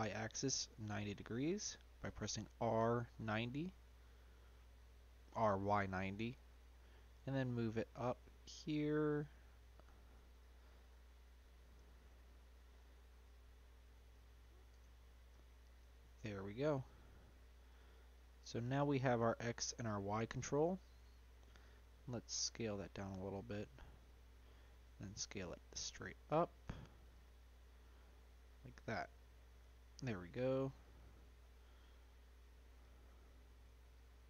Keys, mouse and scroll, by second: 2.9-6.1 middle drag, 7.1 g, 11.7 s, 14.1 s, 14.9 g, 18.0 middle click, 18.4-18.9 scroll down 2, 18.9-19.6 middle drag, 19.6-20.9 scroll up 2, 20.9 s, 23.1-24.3 middle drag, 24.3-24.8 scroll down 2, 24.8 s, 27.7-28.7 middle drag, 28.7-29.1 scroll down 1, 29.1-30.1 shift+middle drag, 30.1-30.8 scroll up 1, 30.8 Tab, 31.4 middle click, 31.8-32.8 scroll up 2, 32.8 click, 33.8 shift+click.